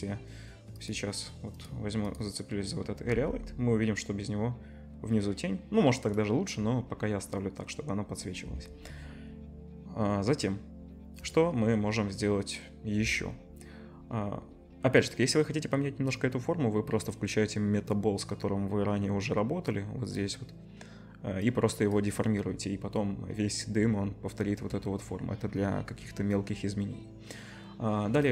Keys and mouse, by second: 0.8 click, 0.9 middle click, 1.5 click, 1.7 middle click, 2.0 click, 2.1-3.4 middle drag, 3.1 g, 11.2 click, 14.6-19.7 middle drag, 19.7-24.8 drag.